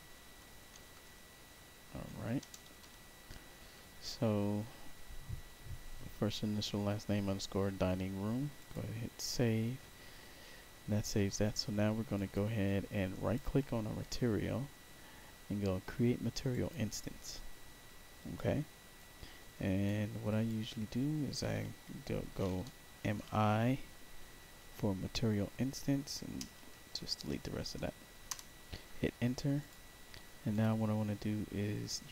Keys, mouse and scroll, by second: 0.0-0.6 typing, 2.3 BackSpace, 2.7 m, 8.5 click, 12.1 click, 13.0 right click, 16.4 click, 18.1 click, 18.9 click, 20.2 click, 22.8 shift+i, 26.3-27.2 typing, 28.2 Return, 29.5 click, 30.4-32.1 drag.